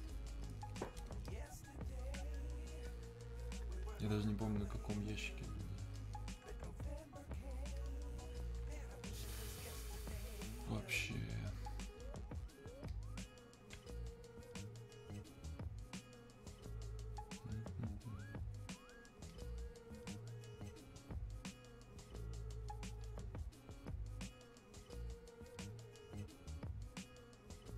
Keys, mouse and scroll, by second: 5.4 click.